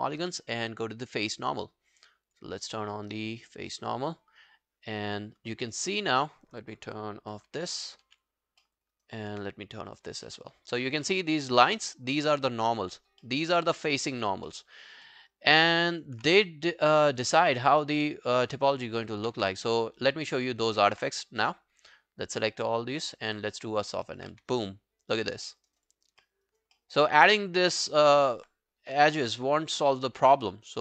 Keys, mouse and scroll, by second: 5.7 alt+middle click, 6.0 alt+click, 7.4 alt+b, 7.7 alt+b, 8.1 alt+b, 8.6 alt+middle click, 9.0 alt+right click, 10.3 alt+middle click, 10.7 alt+right click, 11.1 alt+middle click, 11.4 alt+right click, 13.3 alt+middle click, 13.5 alt+right click, 13.7 alt+click, 14.5 alt+middle click, 14.8-15.1 alt+scroll down 3, 15.1 alt+middle click, 15.3 alt+right click, 15.7 alt+middle click, 15.9 alt+right click, 16.9 alt+middle click, 17.1 alt+right click, 17.4 alt+middle click, 17.7 alt+scroll down 3, 18.0 alt+middle click, 18.5 alt+click, 18.8 alt+right click, 19.0 alt+middle click, 19.4 w, 19.6 right click, 20.6 right click, 20.8 alt+middle click, 23.6 double click, 23.9 alt+middle click, 24.1 alt+right click, 24.4 q, 24.5 right click, 25.5 alt+middle click, 25.7 alt+right click, 25.9 alt+click, 26.2 alt+middle click, 26.5 alt+right click, 26.8 alt+middle click, 27.8 alt+middle click, 29.1 alt+middle click, 29.3 alt+right click, 29.8 alt+middle click, 30.1 alt+scroll down 1, 30.4 alt+click, 30.7 alt+right click.